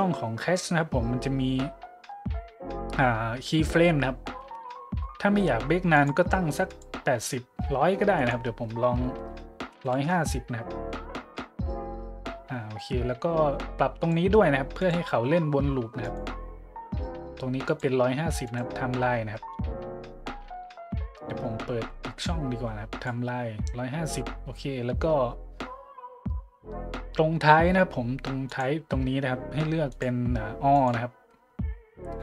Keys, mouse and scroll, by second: 5.9 click, 6.6 click, 8.2 click, 9.6 KP_1, 9.8 KP_5, 9.9 KP_0, 10.1 KP_Enter, 14.0 click, 14.8-15.1 drag, 16.0 click, 17.6 click, 18.4 click, 22.2 click, 25.0 middle click, 28.5 click, 29.9 click, 30.7-31.0 drag, 31.5 middle click.